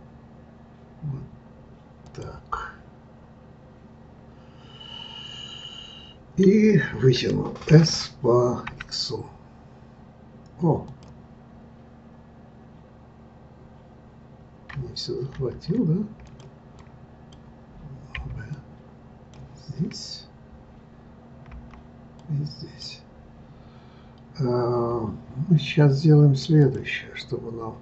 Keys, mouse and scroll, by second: 7.7 s, 11.5 scroll up 3, 13.6-15.3 scroll down 2, 15.3 ctrl+z, 16.3 click, 16.8 click, 18.1 b, 21.5 b, 26.6 click, 27.2 click.